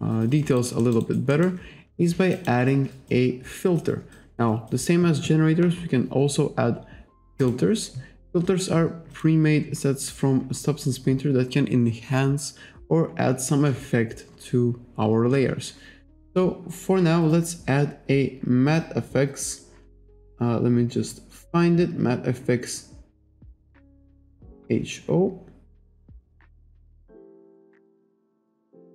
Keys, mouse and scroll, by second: 0.6 alt+right click, 1.1 alt+right click, 1.4 alt+middle click, 2.4 click, 7.4 click, 9.2 click, 9.9-10.2 scroll down 1, 10.8-11.2 scroll up 1, 14.3-14.7 scroll down 1, 14.9-15.3 scroll down 1, 16.7-17.1 scroll down 1.